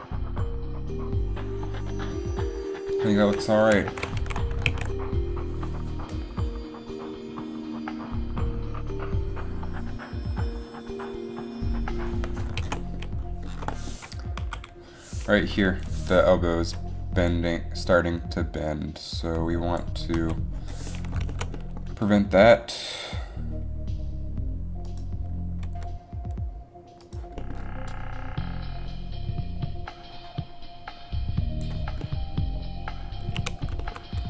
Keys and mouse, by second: 4.0 shift+Left, 4.8 alt+a, 7.9 alt+a, 12.8 alt+a, 14.6 Down, 16.5 Left, 17.5 Down, 17.5 Left, 20.3 Down, 22.1 g, 25.8 g, 28.0 click.